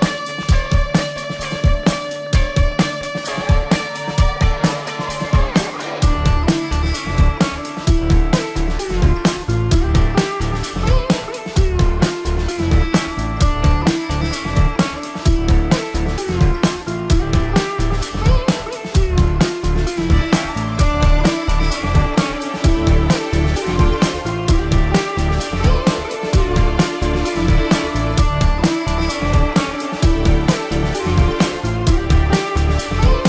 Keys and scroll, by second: 3.0 ctrl+=, 3.7 ctrl+=, 5.9 ctrl+=, 14.6 ctrl+alt+z, 19.0 ctrl+alt+z, 28.1 ctrl+=, 29.1 ctrl+=, 30.4 ], 33.0 space.